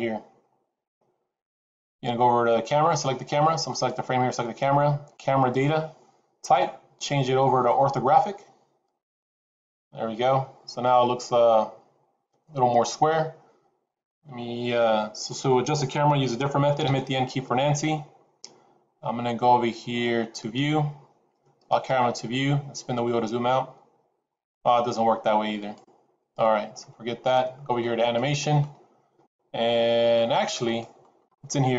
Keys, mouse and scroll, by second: 3.6 click, 6.4 click, 9.8-11.3 scroll down 3, 16.8 n, 20.3 click, 21.7 click, 22.7-24.0 scroll down 4, 24.0-24.6 scroll up 3, 25.5 click, 26.7 n, 30.6 click.